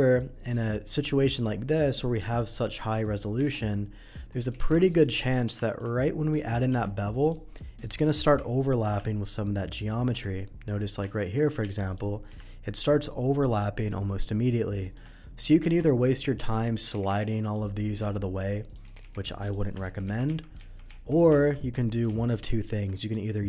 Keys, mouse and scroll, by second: 0.3 middle click, 1.1 middle click, 3.0 middle click, 3.3 Tab, 4.5 alt+v, 4.9 click, 5.2 middle drag, 5.6 shift+middle drag, 6.2 shift+click, 6.6 q, 7.2 click, 8.2 n, 9.5 shift+click, 9.9 shift+middle drag, 10.3 shift+middle click, 11.0 shift+middle click, 11.6 q, 11.8 click, 14.8 shift+click, 15.6 Tab, 16.5 click, 16.9 g, 17.4 click, 17.4 g, 18.6 click, 19.4 click, 19.4 g, 19.8 ctrl+z, 20.0 ctrl+z, 20.7 ctrl+z.